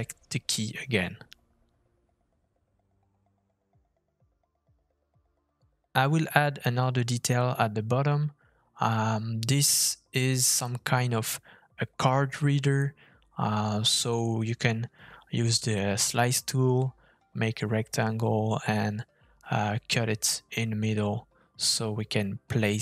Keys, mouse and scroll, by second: 0.6 click, 1.6 Tab, 2.4 click, 2.5 g, 3.8 Tab, 4.2 Tab, 4.7 middle click, 5.6 middle click, 6.1 click, 6.8 f, 10.3 shift+middle click, 16.2 middle click.